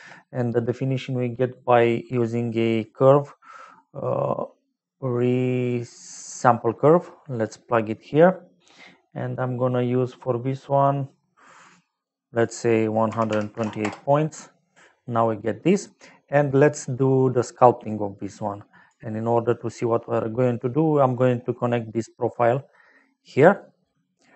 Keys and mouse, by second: 2.8 click, 6.3 click, 7.3 click, 11.9 click, 12.3 click, 13.0 KP_1, 13.3 KP_2, 13.5 KP_8, 13.8 Return, 17.3 middle click, 18.4 click, 19.7 click, 23.7 middle click.